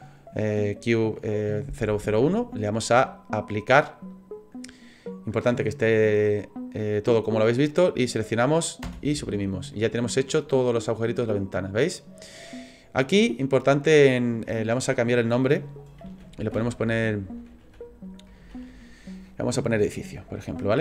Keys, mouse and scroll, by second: 4.1 click, 7.5 right click, 8.8 Delete, 9.7 middle click, 12.0 scroll down 1, 12.8 scroll down 1, 13.0 click.